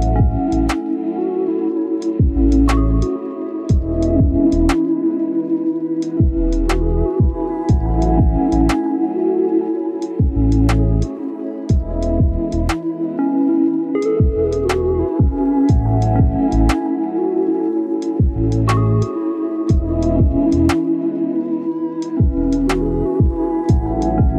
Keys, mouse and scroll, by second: 0.0-0.4 scroll down 1, 0.4 click, 0.9 scroll down 1, 1.2 scroll up 1, 1.5 click, 1.6 scroll down 1, 1.8 scroll up 1, 2.5 click, 2.7-4.9 right drag, 4.9 scroll up 1, 5.1-6.3 right drag, 6.4 click, 7.2 scroll down 1, 7.3 scroll up 1, 8.1 click, 8.5 scroll down 1, 8.7 scroll up 1, 8.9 click, 9.9 scroll down 1, 10.0-11.2 scroll up 1, 11.2 click, 11.7 scroll up 1, 11.9 right click, 12.4-16.5 drag, 16.5 scroll down 1, 16.6 scroll up 1, 16.8-21.2 drag, 22.4 scroll down 1, 22.5 scroll up 1, 22.8-24.3 drag.